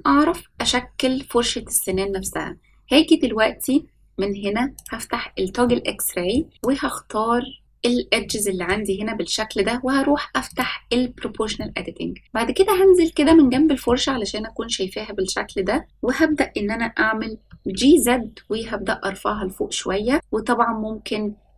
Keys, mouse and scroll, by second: 4.7 click, 5.6 middle click, 6.5-7.6 drag, 8.2 shift+middle click, 10.4 click, 11.5-13.2 middle drag, 13.4 shift+middle click, 17.4 g.